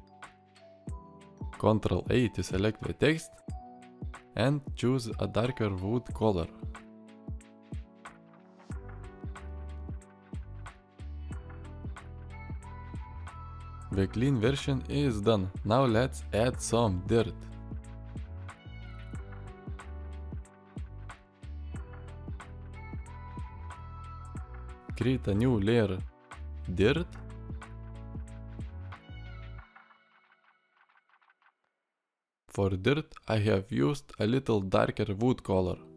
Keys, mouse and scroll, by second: 12.6 alt+r, 13.4-13.9 drag, 17.5 click, 18.0 ctrl+click, 18.3 click.